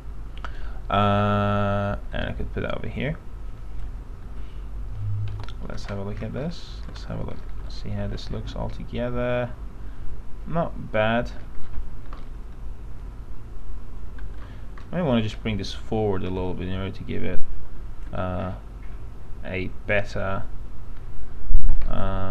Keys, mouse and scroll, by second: 4.5 2, 5.5 p, 5.9-6.5 scroll down 1, 6.7 alt+middle click, 7.1 alt+z, 7.7-8.3 scroll down 1, 8.3-11.7 alt+middle drag, 11.7-12.7 scroll down 1, 12.7-14.5 alt+middle drag, 15.0 middle click, 15.5-16.6 scroll down 1, 16.6 click, 18.3 e, 20.1-21.9 drag.